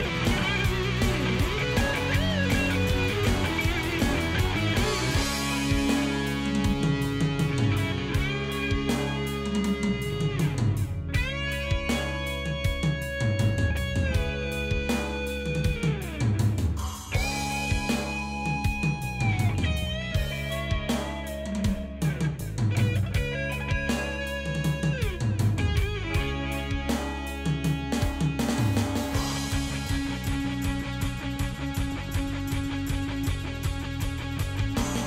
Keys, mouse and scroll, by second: 4.5 shift+click, 5.9 click, 6.9 click, 7.7 click, 8.4 click, 9.0 click, 9.5 click, 10.2 click, 11.3 click, 11.8 click, 12.9 click, 15.6 click, 17.4 click, 18.9 click, 19.9 click, 22.0-22.9 drag, 24.3 click, 27.7 shift+click, 28.7 click, 29.4 click, 30.9 shift+click, 31.4 shift+click, 32.4 ctrl+s.